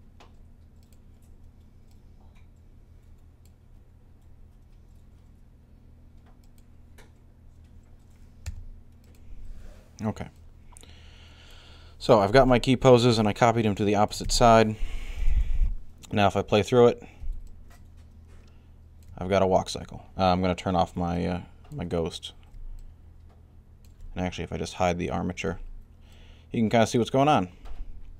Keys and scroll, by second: 8.3 i, 15.1 alt+a.